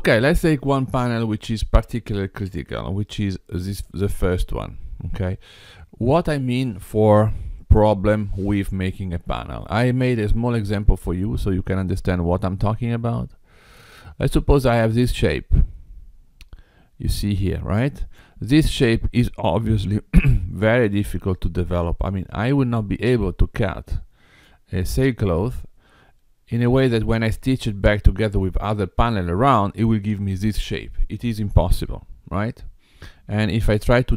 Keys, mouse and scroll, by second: 1.8 middle click, 4.3 middle click, 10.1 middle click, 14.1 click, 15.5-16.4 scroll up 3, 16.4-17.2 scroll down 2, 18.7 middle click, 31.5 middle click.